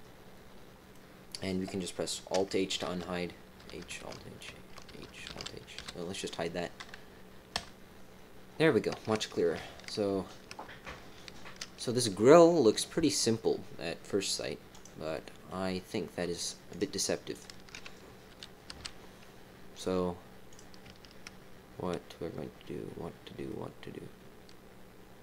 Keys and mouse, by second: 2.8 alt+h, 3.6 h, 4.8 h, 5.7 h, 6.1 click, 7.5 KP_1, 9.8 shift+middle click, 14.7 click, 15.1 middle click, 15.3 click, 15.3 right click, 16.7 click, 17.3 shift+click, 18.7 f, 20.4 click, 23.4-25.2 drag, 23.4-25.2 right drag.